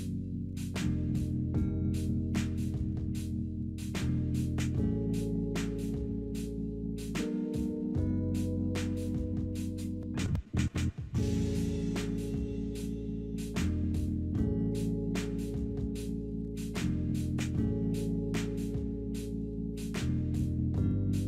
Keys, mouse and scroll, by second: 0.1-0.9 typing, 1.9-4.8 typing, 4.8 Return, 20.7-21.2 drag.